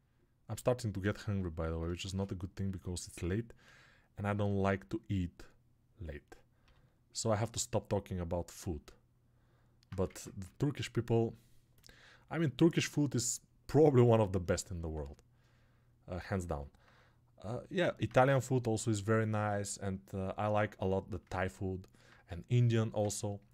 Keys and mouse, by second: 9.9 ctrl+Tab, 13.1-23.5 alt+drag.